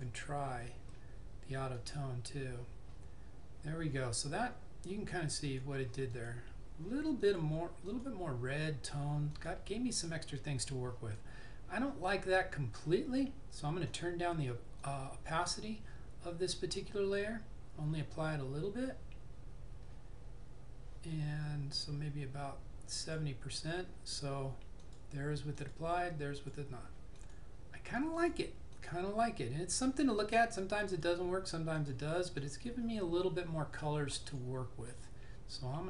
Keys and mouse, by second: 0.0 click, 5.5 click, 5.5 typing, 14.0 click, 18.2 typing.